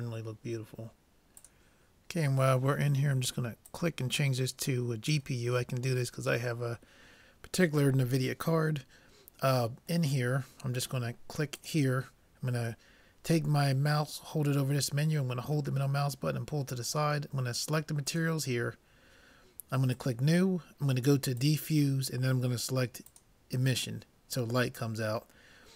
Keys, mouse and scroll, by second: 3.7-5.6 drag, 10.1-11.8 middle drag, 11.6-13.4 drag, 15.8-17.6 middle drag, 18.6-19.9 drag, 20.0-23.3 drag.